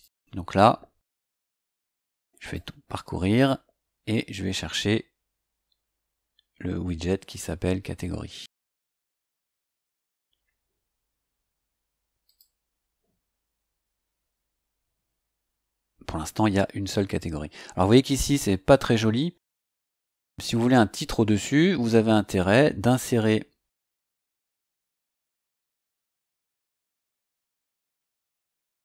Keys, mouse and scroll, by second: 2.4 click, 4.9 scroll down 2, 5.5-5.8 scroll down 2, 6.1 scroll down 2, 6.7-7.0 scroll down 2, 8.1-8.4 scroll down 2, 8.8 scroll up 2, 12.2 click, 14.7-15.4 scroll up 3, 23.3-23.9 scroll down 2, 25.6 click, 28.5 click.